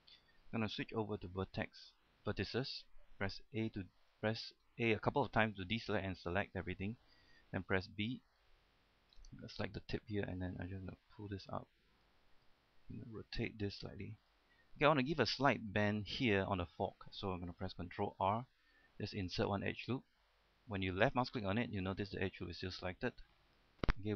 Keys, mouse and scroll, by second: 0.2 shift+middle click, 1.4 ctrl+Tab, 2.3 click, 3.8-5.7 typing, 7.7-8.4 typing, 8.6-12.8 drag, 13.3 typing, 14.5 click, 15.1 middle click, 16.1-17.1 scroll up 1, 17.1-18.0 scroll down 1, 18.2 ctrl+r, 19.4 click, 23.5-24.1 middle drag.